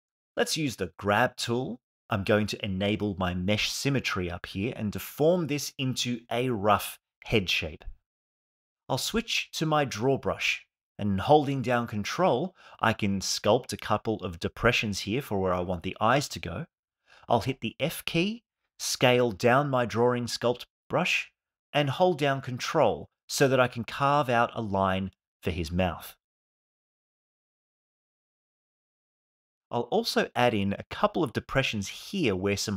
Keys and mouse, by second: 0.2 KP_1, 3.8 KP_3, 4.9 f, 5.5 shift+f, 5.8 click, 6.7 click, 7.2 click, 10.0 ctrl+z, 18.9 f, 24.8 click, 29.0 alt+middle click, 30.3 f.